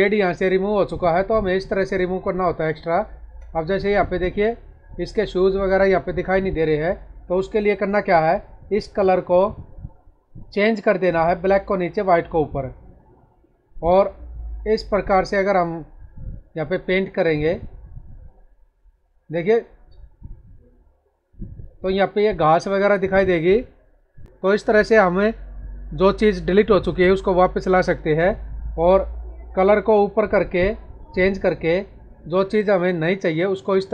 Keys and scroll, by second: 1.7 space, 6.3 ctrl+z, 28.1 ctrl+z.